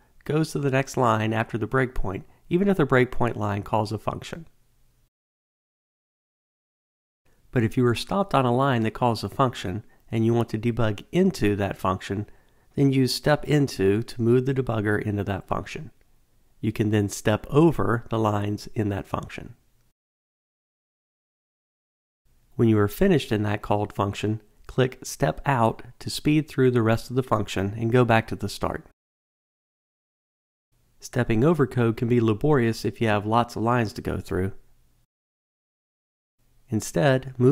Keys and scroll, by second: 5.6 alt+super+r, 15.7 F7, 19.0 F8, 24.5 shift+F8, 31.2 alt+super+r, 36.4 F7.